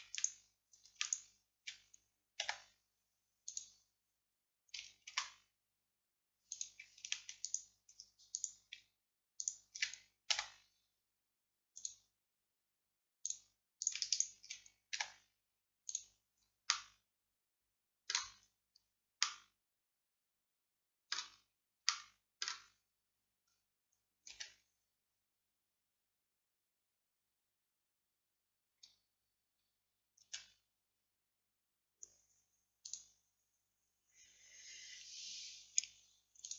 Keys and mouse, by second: 2.5 x, 5.2 ctrl+z, 6.6 click, 8.3-13.9 drag, 10.4 x, 15.0 x, 22.0-24.4 middle drag, 24.4 a, 28.7-32.9 middle drag, 30.3 a, 32.9-36.5 drag.